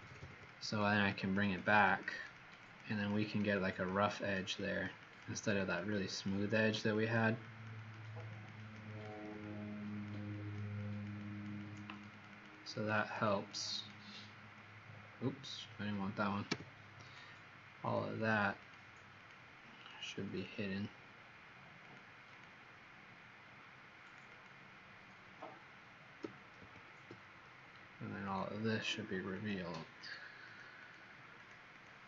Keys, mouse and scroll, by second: 0.0-0.1 typing, 0.4 click, 0.9 click, 1.2 click, 1.5 click, 1.7 click, 1.8 click, 2.2 click, 2.2 click, 2.7 click, 2.7 typing, 2.8 click, 3.2 click, 3.6 click, 4.0 click, 4.6 click, 4.9 click, 5.2 click, 5.4 click, 5.9 click, 6.5 click, 6.8 click, 7.4 click, 7.7 click, 7.9 click, 8.4 click, 8.6 click, 8.8 click, 9.3 click, 11.6 typing, 13.0 typing, 14.8-16.4 alt+scroll down 5, 16.4 l, 17.0 click, 17.8 click, 18.3 click, 18.8 click, 19.3 click, 19.7 click, 21.8 click, 24.2 click, 26.6 ctrl+Delete, 28.2 click, 29.9 click, 30.4 click, 30.9 click, 31.3 click, 31.7 click.